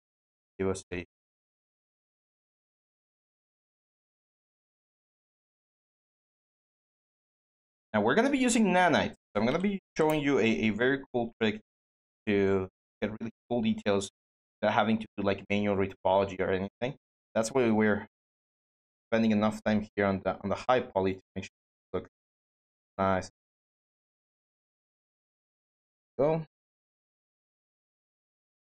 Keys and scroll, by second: 9.0-10.1 typing.